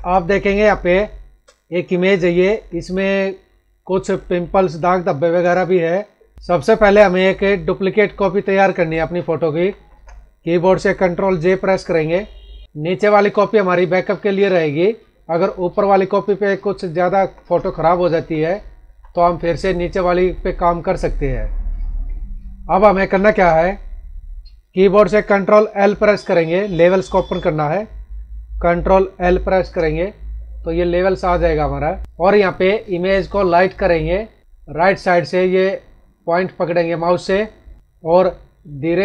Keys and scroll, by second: 0.5 space, 2.4 ctrl+=, 5.4 space, 6.3 F9, 8.7 ctrl+=, 9.5 ctrl+-, 11.8 ctrl+j, 16.9 ctrl+=, 18.8 ctrl+-, 23.0 ctrl+=, 29.5 ctrl+l, 34.4 ctrl+l.